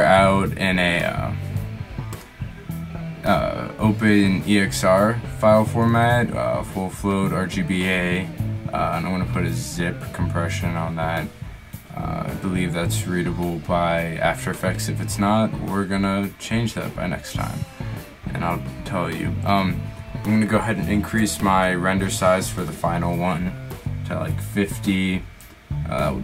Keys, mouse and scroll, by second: 7.5-10.5 middle drag.